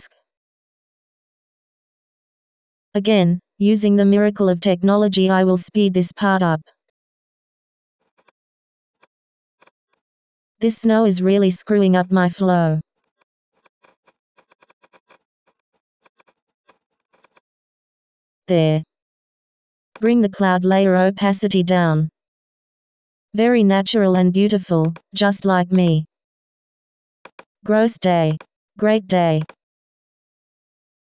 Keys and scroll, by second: 0.7 b.